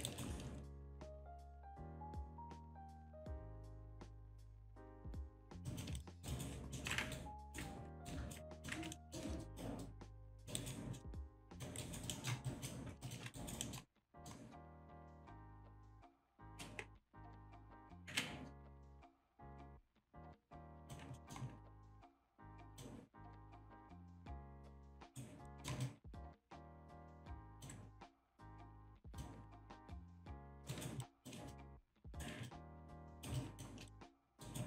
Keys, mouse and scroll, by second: 0.1 alt+right click, 3.2 scroll down 1, 4.3 click, 5.7 alt+click, 6.0 alt+shift+click, 6.3 alt+right click, 6.8 alt+middle click, 7.2 ctrl+right click, 8.1 ctrl+right click, 8.6 click, 9.0 alt+middle click, 10.2 click, 10.6 alt+right click, 11.0 alt+middle click, 11.3 alt+click, 11.8 alt+right click, 12.1 alt+middle click, 12.5 alt+click, 13.1 alt+shift+click, 13.4 alt+right click, 13.6 alt+middle click, 14.1 alt+middle click, 14.7 alt+click, 15.1 alt+middle click, 15.6 alt+click, 16.0 alt+middle click, 16.3 alt+shift+click, 17.6 click, 18.1 ctrl+z, 19.0 click, 19.8 click, 20.9 click, 21.2 alt+middle click, 22.0 click, 22.7 click, 23.5 click, 23.8 alt+click, 24.4 alt+click, 24.7 alt+shift+click, 25.0 alt+right click, 25.5 alt+middle click, 27.5 click, 28.3 click, 29.1 click, 29.6 ctrl+z, 30.4 click, 30.7 alt+right click, 31.0 alt+click, 31.5 alt+click, 32.1 alt+right click, 32.5 alt+click, 32.8 alt+shift+click, 33.1 alt+right click, 33.4 alt+click, 33.9 alt+shift+click, 34.2 alt+middle click, 34.4 alt+right click.